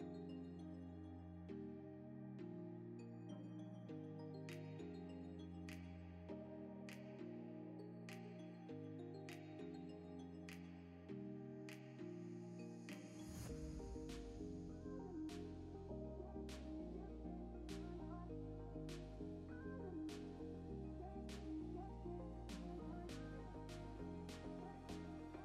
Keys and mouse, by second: 0.0 click, 0.4 click, 0.5 click, 1.5 click, 1.8 click, 1.9 click, 2.5 click, 2.8 shift+click, 3.2 click, 3.7 drag, 3.8 right click, 4.2-4.6 shift+middle drag, 5.3 shift+right click, 5.7 shift+a, 6.4 Tab, 6.8 f, 6.9 e, 8.6 Tab, 8.9 s, 9.3 g, 10.1 s, 10.5 Tab, 11.4 2, 11.8 alt+click, 12.3 ctrl+b, 13.8 Tab, 13.9 right click, 14.3 ctrl+s, 17.1 shift+s, 17.4 shift+a, 18.1 Tab, 18.2 s, 19.1 e, 21.6 3, 22.4 shift+middle click, 23.4 2, 24.0 ctrl+b.